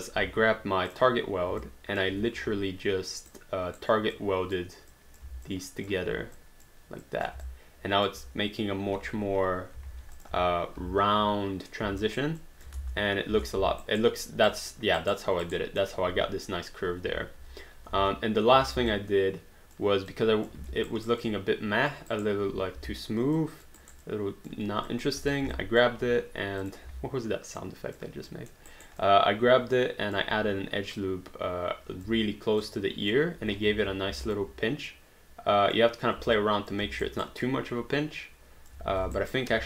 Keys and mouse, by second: 0.0 alt+click, 1.1 click, 1.6 alt+click, 2.4 1, 3.3 right click, 4.1 click, 5.5 alt+click, 6.4 click, 7.5 alt+click, 9.0 q, 9.9 alt+d, 10.2 click, 10.4 3, 12.1 alt+right click, 12.4 alt+click, 12.8 space, 13.9 alt+right click, 15.8 alt+middle click, 17.9 space, 18.9 alt+click, 20.1 alt+click, 20.6 alt+d, 21.0 alt+right click, 21.2 alt+click, 22.2 alt+right click, 23.4 alt+click, 23.8 alt+right click, 24.1 alt+click, 25.3 click, 25.5 alt+click, 27.6 alt+click, 28.3 alt+middle click, 28.7 alt+right click, 29.0 alt+click, 31.0 click, 32.7 alt+click, 33.7 ctrl+z, 34.2 alt+click, 34.9 click, 36.4 alt+click, 36.8 alt+d, 37.1 alt+right click, 37.5 alt+click, 38.9 ctrl+z, 39.2 alt+right click.